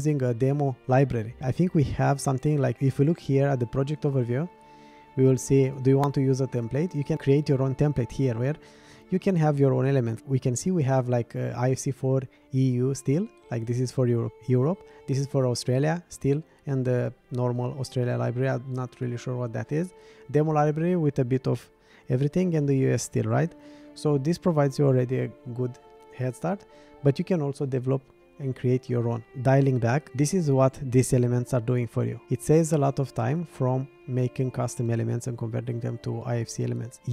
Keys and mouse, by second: 5.8-28.2 drag.